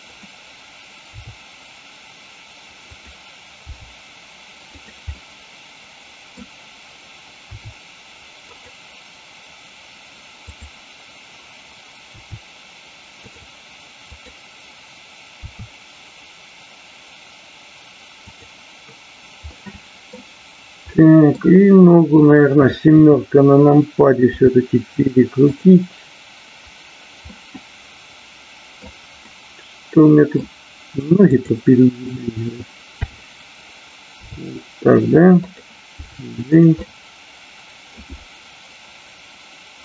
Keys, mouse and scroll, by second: 0.1 click, 2.9 click, 3.5 g, 4.7 click, 5.2-6.5 middle drag, 7.4 r, 8.6 click, 10.3-11.2 drag, 12.1 r, 13.1 click, 13.9 click, 15.3 r, 18.3 click, 19.5 middle click, 20.8 middle click, 22.1 click, 22.8 KP_7, 24.2 r, 25.5 click, 27.3-28.9 middle drag, 29.3-30.3 middle drag, 32.9 KP_7, 34.2 r, 35.3 click, 36.1 g, 36.6 click, 36.7-38.0 middle drag.